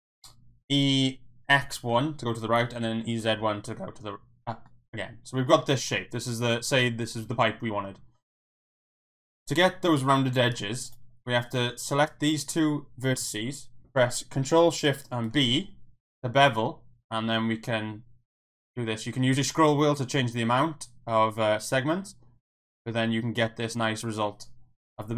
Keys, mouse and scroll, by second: 1.6 KP_1, 1.9 KP_Enter, 2.5 e, 2.8 z, 3.1 KP_1, 3.3 KP_Enter, 4.7 middle click, 5.7-6.8 middle drag, 8.5 click, 8.9 middle click, 15.2 ctrl+shift+b.